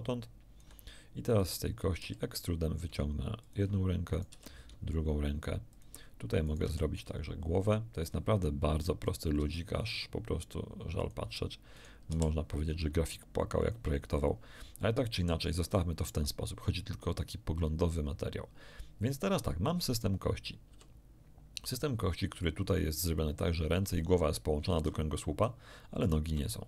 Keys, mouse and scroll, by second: 1.4 ctrl+right click, 2.0 e, 3.4 ctrl+click, 4.1 ctrl+right click, 4.2 ctrl+e, 5.7 ctrl+click, 6.4 ctrl+right click, 6.6 ctrl+e, 8.0 ctrl+click, 9.0 right click, 9.3 e, 11.0 ctrl+click, 11.7 ctrl+right click, 12.0 ctrl+e, 13.6 ctrl+click, 14.4 ctrl+scroll up 1, 14.8 shift+middle click, 19.9 right click, 20.6 g, 24.6 Escape, 26.0 right click, 26.2 g.